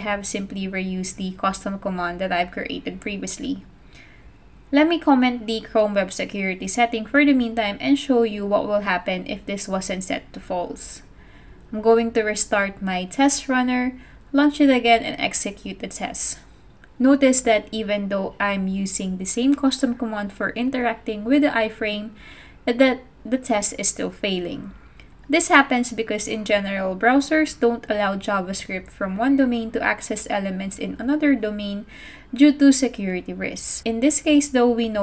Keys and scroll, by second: 10.5 super+/, 11.4 super+s, 12.6 ctrl+c, 14.7 Up, 14.9 Return, 20.9 shift+Return, 24.6 super+Tab, 25.4 super+Tab, 25.7 super+Tab.